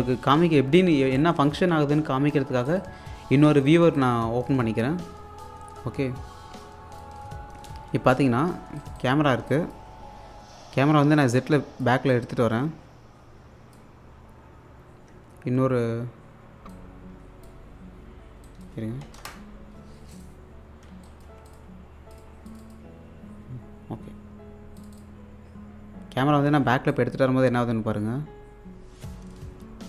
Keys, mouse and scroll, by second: 0.0-1.6 typing, 2.7 click, 3.9-8.2 drag, 8.8 click, 10.3-11.2 scroll up 1, 11.6-14.9 drag, 16.7-19.7 drag, 20.2 click, 21.3 2, 21.5 click, 24.8 click, 27.0-29.8 drag.